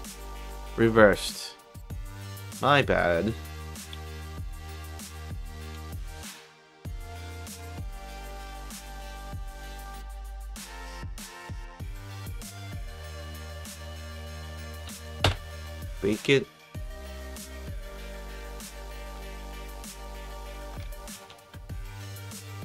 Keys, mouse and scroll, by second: 1.7 click, 2.4 click, 4.4 click, 5.7 ctrl+shift+c, 6.0 shift+click, 7.1-8.2 drag, 8.8-10.3 drag, 10.4 click, 12.2 click, 13.1 click, 15.7 b, 19.0 alt+middle click, 19.5 alt+middle click, 19.9 alt+middle click, 20.5 alt+click, 21.1 ctrl+shift+c, 21.6 alt+shift+c, 21.6 ctrl+alt+shift+middle click, 22.0 click.